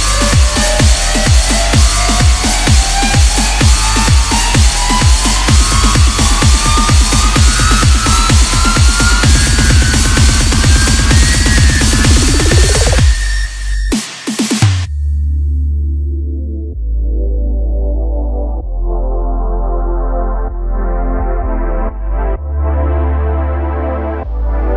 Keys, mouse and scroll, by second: 0.9-2.9 drag, 2.9-3.9 scroll down 1, 3.9 s, 7.2 shift+b, 9.6-10.2 scroll down 5, 10.2-11.7 middle drag, 11.7-13.9 scroll up 2, 13.9 i, 15.5 s, 19.0 KP_1, 20.4-21.0 scroll down 3, 21.0-21.8 scroll up 2, 21.8-22.3 scroll down 2, 22.3-24.7 middle drag.